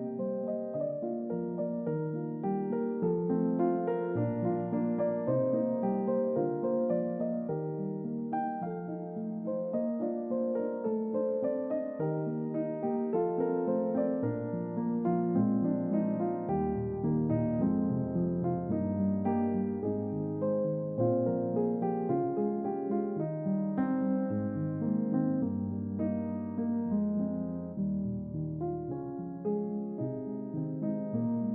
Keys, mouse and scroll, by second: 0.1 Return, 1.6 click, 2.4 scroll down 2, 3.8 click, 6.3 click, 7.1 scroll down 2, 9.1 middle click, 11.0 middle click, 12.2 middle click, 13.8 scroll down 2, 14.3 shift+middle click, 18.2 shift+a, 23.6 click, 25.0 s, 26.3 Escape, 27.5 g, 30.4 click, 30.9 scroll down 2.